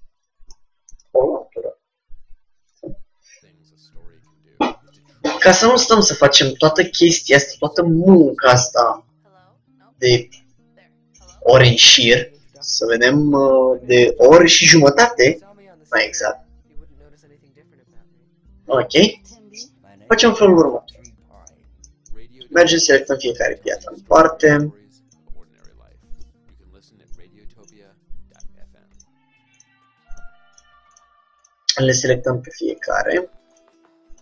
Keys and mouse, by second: 0.6-3.0 middle drag, 4.5-6.9 middle drag, 21.3-23.1 middle drag, 22.9-34.2 drag.